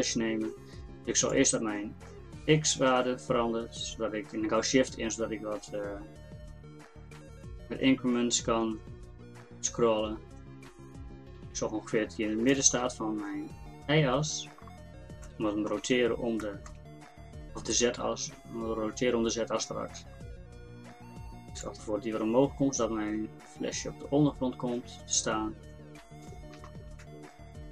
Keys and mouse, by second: 1.3-15.2 drag, 21.6-27.7 drag.